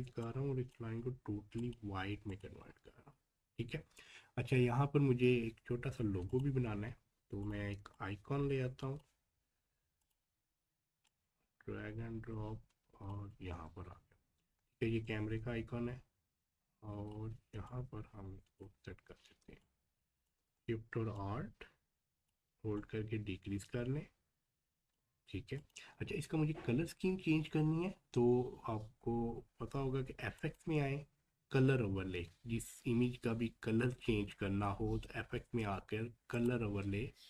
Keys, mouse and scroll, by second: 2.6 scroll down 1, 3.7-5.5 scroll up 1, 6.3-15.0 drag, 15.0-18.8 alt+shift+drag, 18.8 scroll up 1, 19.4 space, 19.6 click, 19.9 space, 21.2-25.6 alt+shift+drag, 26.0-26.4 scroll down 1, 30.4 scroll down 1, 30.4 click, 36.3 click.